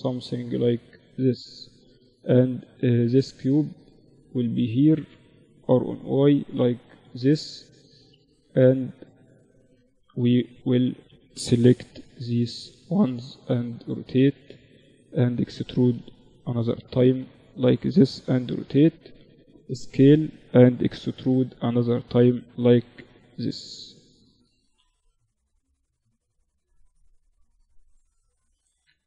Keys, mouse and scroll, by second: 1.0 right click, 2.9-4.7 drag, 2.9-4.0 right drag, 4.4 r, 6.0 KP_3, 6.5 Tab, 8.2-9.9 drag, 8.3-10.6 typing, 12.0 r, 13.1-16.0 middle drag, 14.8 e, 17.4 r, 18.4 s, 19.8 e, 21.4 s, 22.5-24.4 drag, 23.5 r, 24.8 Tab, 25.2 middle click, 25.2 z, 28.0 ctrl+3.